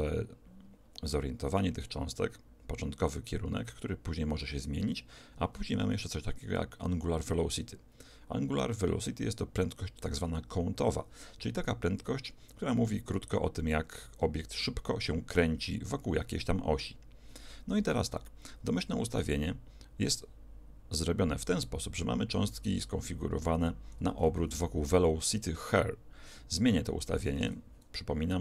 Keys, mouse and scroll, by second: 27.4 alt+a.